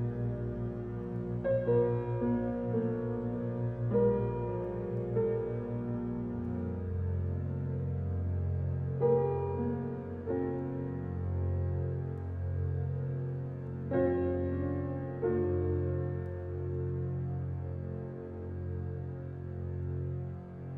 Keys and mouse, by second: 0.0 click, 1.0 click, 4.4 click, 7.7-8.0 typing, 9.3 click, 11.1 click, 12.4 BackSpace, 13.6 0, 15.1-16.4 drag, 17.0 alt+shift+click, 17.8 ctrl+alt+click, 18.9 click, 19.6 click.